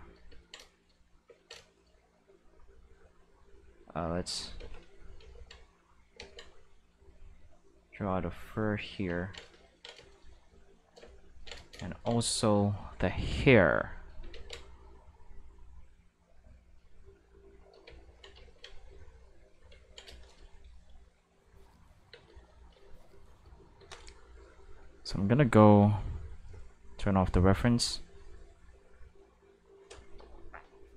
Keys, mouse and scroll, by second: 2.8 click, 3.0 click, 3.4 click, 3.8 click, 4.6 ctrl+z, 5.2 ctrl+z, 6.2 ctrl+z, 6.6-8.4 drag, 12.8-14.1 drag, 14.3 ctrl+z, 15.1-16.6 drag, 17.2 click, 18.9 click, 20.9 click, 21.2 space, 22.1 space, 22.3 click, 22.6 space, 23.8 space, 25.0 click, 26.0-26.3 drag, 28.1 click, 28.4 click, 28.7-30.3 drag, 30.6 click.